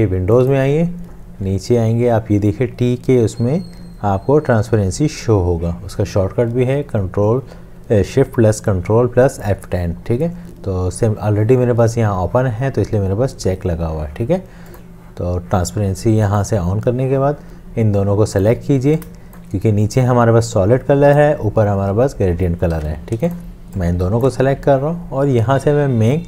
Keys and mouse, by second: 19.2 shift+click, 22.8 ctrl+z.